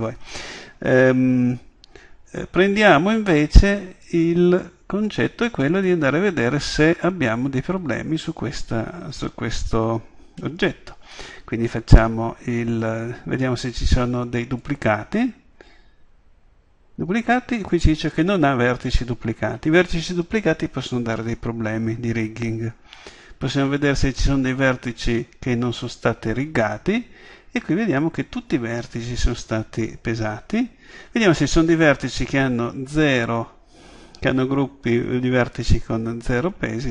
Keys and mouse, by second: 1.0 Tab, 31.9 click.